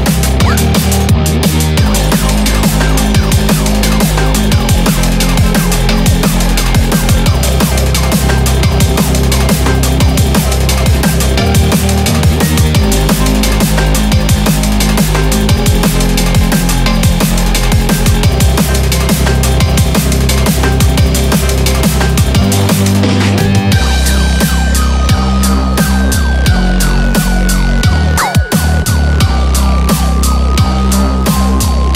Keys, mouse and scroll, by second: 1.0 shift+middle click, 1.4 scroll up 5, 9.8 ctrl+z, 9.8 click, 10.6 click, 14.3-15.2 scroll up 4, 15.2-16.4 scroll up 1, 16.4-17.4 scroll down 1, 18.5 r, 27.9-28.2 scroll, 29.1 scroll down 3, 29.2-29.6 scroll, 29.6 scroll up 3, 29.8-30.1 scroll down 3, 30.5 middle click.